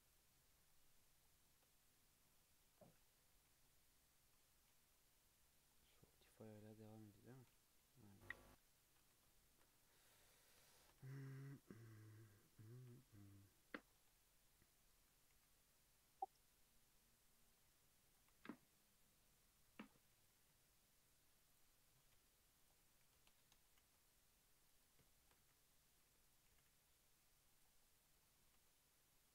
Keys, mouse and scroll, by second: 3.0 scroll up 1, 3.0-3.6 scroll down 4, 3.1 Tab, 3.3 alt+z, 3.6-5.2 middle drag, 5.2 KP_3, 5.7 scroll up 1, 5.9-6.9 middle drag, 6.9 Tab, 7.8 KP_3, 8.1-8.4 scroll up 2, 8.4 Tab, 8.7 Tab, 9.0 alt+z, 9.3 shift+middle click, 9.8-10.2 scroll up 1, 10.2 2, 10.4 click, 10.7-11.0 shift+middle drag, 11.0 e, 12.8 1, 14.9 2, 15.3 g, 17.9 1, 18.1 click, 18.3 g, 20.0 2, 20.2 click, 20.4 e, 21.8 s, 23.0 s, 23.7 g, 25.1 shift+middle click, 25.4 e, 26.5 g, 27.8-28.4 middle drag, 28.4 g.